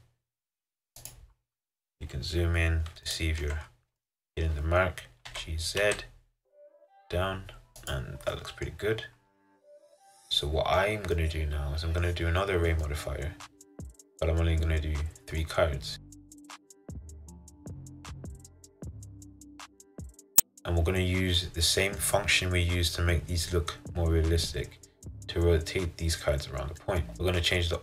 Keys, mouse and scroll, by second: 1.4-3.2 scroll up 6, 3.2 shift+middle click, 3.7-4.1 scroll up 1, 4.1-5.4 shift+middle drag, 5.4 g, 8.4 middle click, 8.9-9.8 scroll down 9, 9.8-16.7 middle drag, 16.7-20.3 drag, 21.5-27.2 middle drag, 27.2 scroll down 1, 27.3-27.8 scroll up 1.